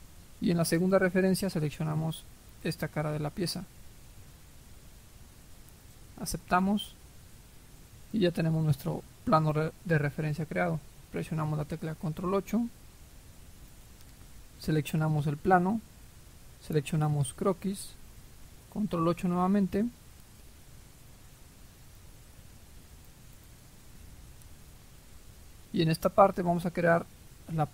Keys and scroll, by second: 11.4 ctrl+8.